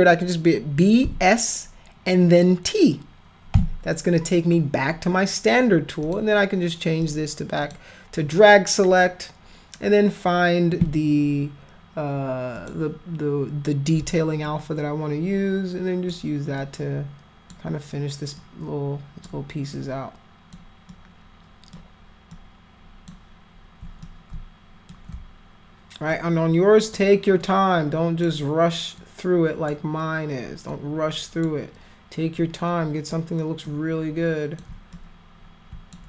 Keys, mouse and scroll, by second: 1.0 s, 3.5 t, 6.0 click, 7.0 click, 7.6 click, 12.5 click, 14.4-16.1 alt+drag, 16.6 alt+click, 18.4 alt+click, 19.7 alt+click, 20.9 alt+click, 22.3 alt+click, 24.0 shift+click, 26.1 alt+click, 27.4 alt+click, 28.9 alt+click, 30.7 alt+click, 32.3 alt+click, 33.6 alt+click, 34.9-35.9 drag.